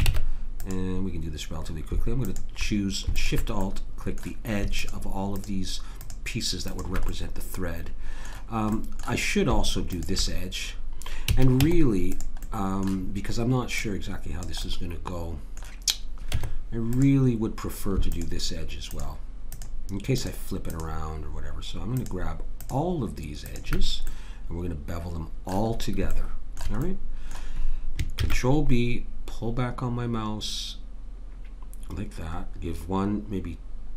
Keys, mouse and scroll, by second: 0.1 ctrl+Tab, 2.2 click, 3.7 click, 7.1 click, 8.8-9.9 middle drag, 9.9 click, 9.9-11.3 right drag, 11.3 a, 11.6 Tab, 12.5-13.7 middle drag, 13.7 click, 13.7 right click, 15.5 click, 16.3 Tab, 18.1-25.1 drag, 24.1 right click, 25.1-26.4 middle drag, 28.2 ctrl+b.